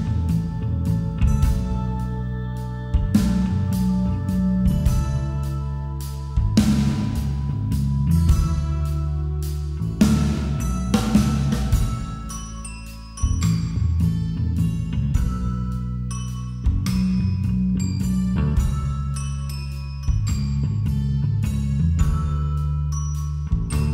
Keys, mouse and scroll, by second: 0.4-1.9 right drag, 1.9 middle click, 2.2 KP_5, 2.4 KP_1, 2.5 middle click, 3.7 g, 7.4 shift+a, 7.9-9.4 drag, 9.4-11.6 middle drag, 16.2-17.3 drag, 16.6-19.1 middle drag, 20.6-23.9 right drag.